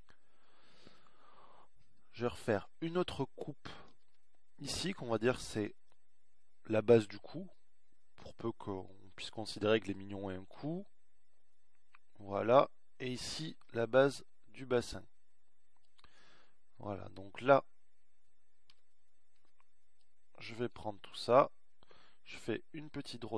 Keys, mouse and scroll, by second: 0.3 a, 0.8 b, 5.1 ctrl+r, 14.7 ctrl+r, 20.1 a, 20.8 b.